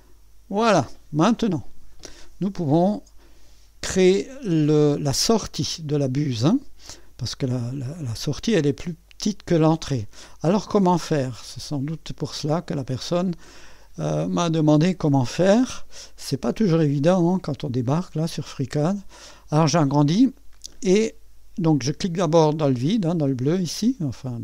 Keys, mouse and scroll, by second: 0.0 click, 4.3-5.5 drag, 10.4 click, 15.4 click, 18.2-21.1 scroll up 1, 22.4 click, 23.3 click.